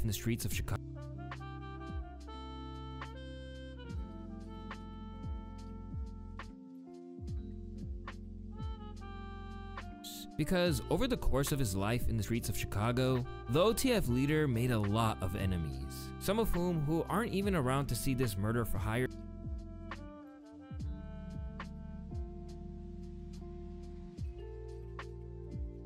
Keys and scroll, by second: 4.6 p, 7.6 ctrl+a, 9.0 F2, 9.7 space.